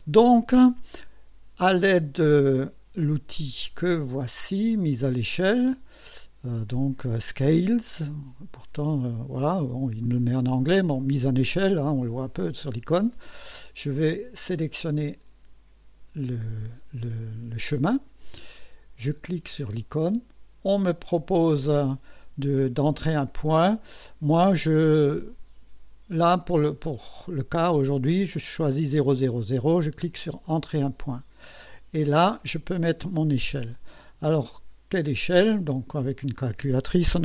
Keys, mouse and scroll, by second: 0.2 click, 14.5 click, 19.8 click, 30.5 click, 35.6 click.